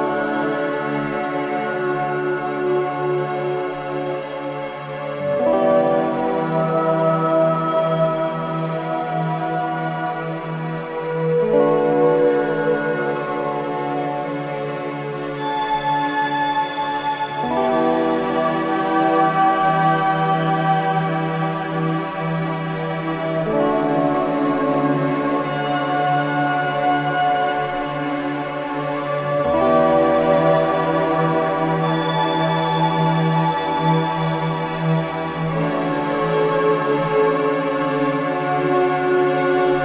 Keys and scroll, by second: 3.2 F3, 5.7 shift+Page_Up, 6.5 Escape, 8.2 ctrl+u, 8.5 Escape, 8.8 F2, 13.1 Delete, 20.5 ctrl+g, 21.3 c, 21.6 Escape, 23.9 shift+Page_Down, 24.3 F3, 24.5 Escape, 27.5 F2, 28.5 shift+Page_Up, 32.3 Escape, 33.2 F8, 34.3-38.2 typing.